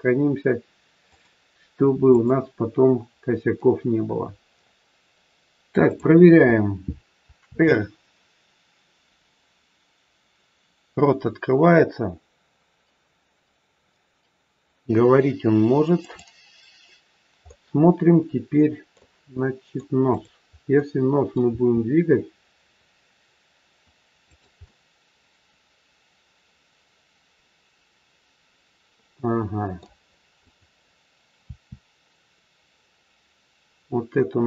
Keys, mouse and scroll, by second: 1.0 click, 3.9 scroll up 3, 5.8 click, 7.4 r, 17.4 middle click, 19.3 middle click, 20.2 click, 20.7 middle click, 21.6 r, 24.6 middle click, 30.3 click, 31.3 r.